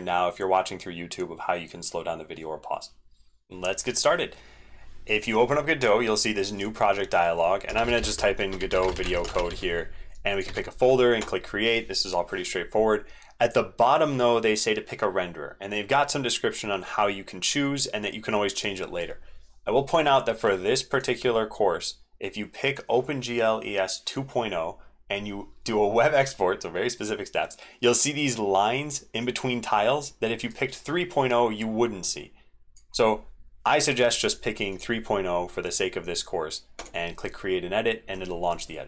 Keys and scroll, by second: 3.6 ctrl+z, 10.4 ctrl+v.